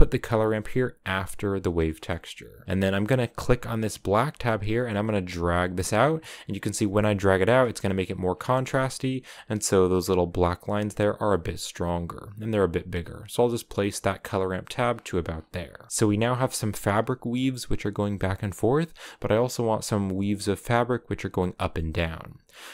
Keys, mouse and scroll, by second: 1.2 click, 3.8-7.1 drag, 7.5-8.0 scroll down 4, 8.1 scroll up 7, 10.2-11.5 drag, 13.1 click, 14.0 click, 15.0-16.0 scroll down 15, 16.0 scroll up 10.